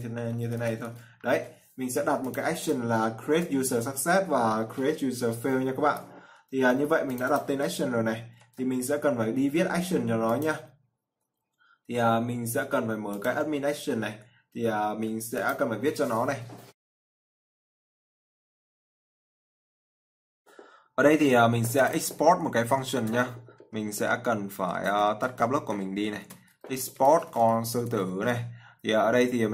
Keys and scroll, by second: 3.3 ctrl+s, 8.7 ctrl+c.